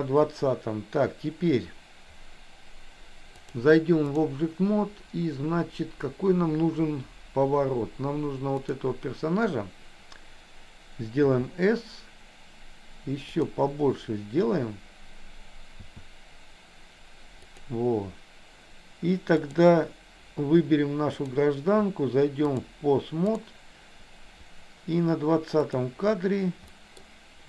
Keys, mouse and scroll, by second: 3.4 click, 11.2 s, 15.8 s, 19.6 click, 21.2 click, 22.5 click, 25.7 click, 26.7 middle click.